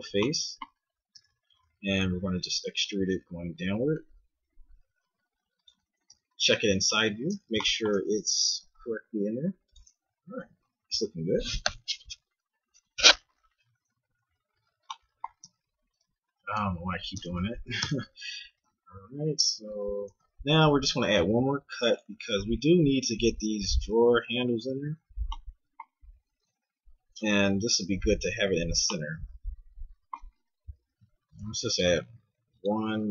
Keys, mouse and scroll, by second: 1.1 e, 6.1 KP_3, 6.6 z, 8.5 g, 10.4 a, 10.5 z, 15.5 Tab, 17.1 ctrl+Tab, 17.8 Tab, 18.6 KP_1, 20.2 z, 21.2 ctrl+r, 25.1 z, 26.4 Tab, 27.1 Tab, 30.7 middle click, 31.3 ctrl+r.